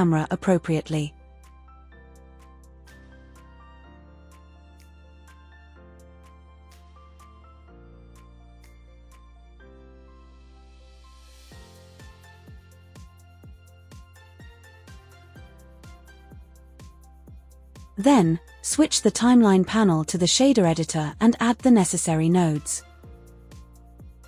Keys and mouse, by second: 1.9 ctrl+alt+KP_0, 5.3 g, 5.7 z, 7.4 g, 8.8 g, 8.9 z, 10.3 g, 10.6 x, 10.9 click, 13.1 KP_0, 14.8 n, 16.1 shift+middle click, 17.4 /.